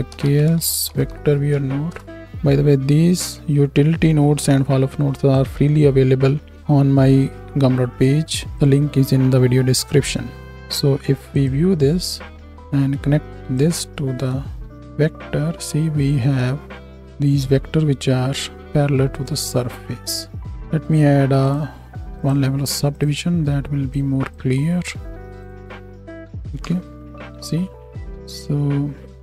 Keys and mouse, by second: 10.5-12.5 drag, 14.1 z, 15.5 z, 17.0 KP_7, 21.5-22.2 drag, 24.3-25.4 drag, 26.6 KP_7, 28.1 z.